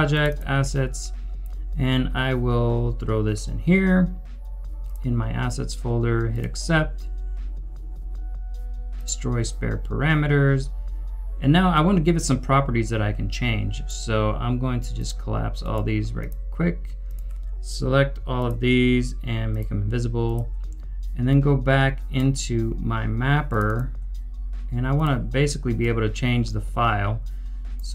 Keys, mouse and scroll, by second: 18.4 shift+click, 23.6 shift+click.